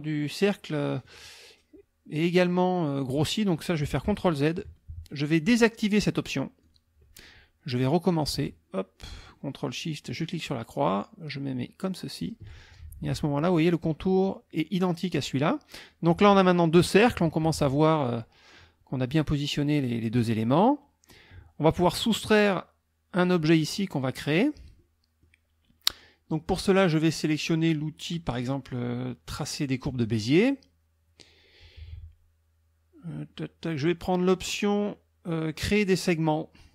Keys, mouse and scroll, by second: 4.0 ctrl+z, 6.6 click, 8.2-12.4 ctrl+shift+drag, 24.8 click, 25.4 middle click, 29.8 click.